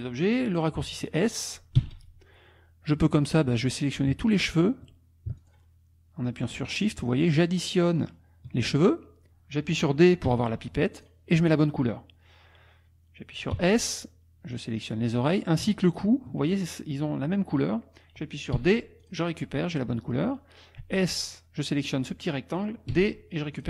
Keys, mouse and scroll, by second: 1.8 s, 3.8 click, 5.4 shift+click, 6.4 shift+click, 7.2 shift+click, 7.9 shift+click, 10.3 d, 10.9 click, 13.6 s, 14.6 click, 15.8 shift+click, 18.5 d, 19.0 click, 19.7 click, 20.8 s, 21.2 click, 22.9 d, 23.5 click.